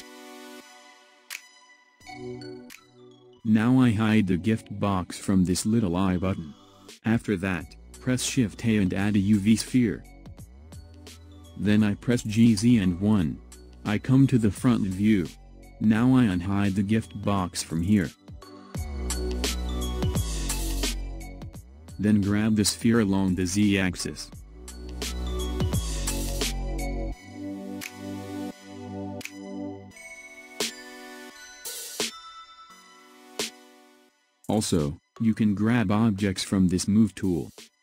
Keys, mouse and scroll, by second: 0.0-0.5 scroll up 2, 0.5-3.6 middle drag, 5.7 click, 7.3 shift+a, 13.0 g, 19.0 click, 20.7 click, 21.5 click, 22.2 click, 23.6 g, 29.9 click, 32.4 click, 37.5-37.8 drag.